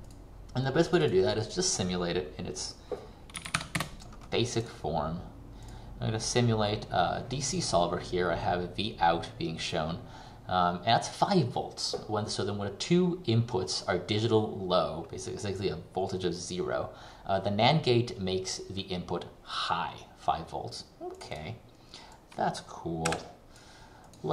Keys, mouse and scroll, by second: 3.2-4.2 typing, 4.7 click.